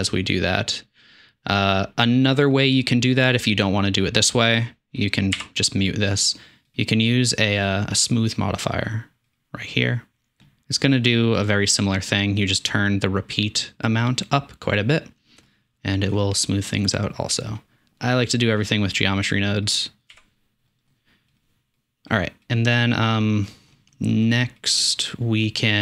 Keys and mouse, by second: 5.6 m, 12.2 middle click, 12.8-15.1 middle drag, 15.6 middle drag, 16.0 middle click, 18.9 drag, 20.4 m, 25.6 middle drag.